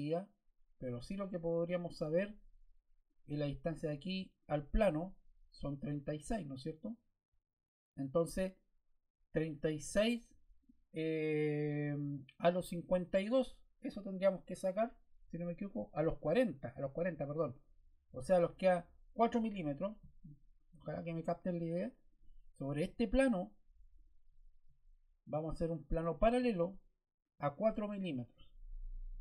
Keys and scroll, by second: 28.7 4, 29.0 Return.